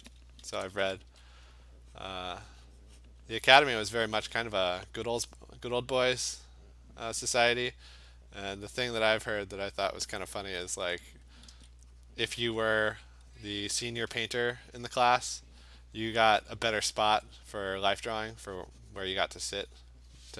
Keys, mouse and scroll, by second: 0.4 [, 0.7 [, 0.8 [, 1.1 [, 1.7 click, 3.1 click, 4.5 click, 7.7 click, 9.1 click, 10.1 alt+click, 11.3 [, 11.6 [, 13.7 click, 14.1 click, 14.2 alt+click, 15.2 alt+click, 16.8 click, 17.1 click, 17.8 alt+click, 19.9 click.